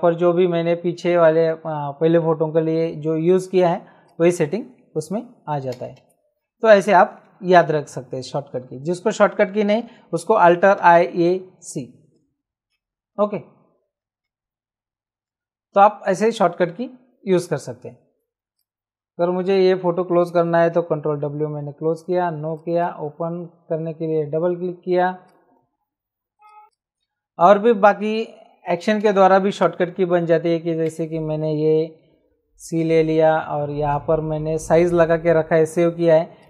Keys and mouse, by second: 4.0 click, 5.7 ctrl+z, 10.8 alt+i, 11.1 alt+a, 12.2 alt+c, 12.7 Escape, 14.3 ctrl+z, 16.0 click, 18.5 click, 21.1 ctrl+w, 21.9 click, 24.3 Escape, 25.3 click, 26.4 click, 28.3 ctrl+j, 29.5 click, 30.7 Return, 31.5 ctrl+shift+e, 32.2 c, 33.8 right click, 36.3 click.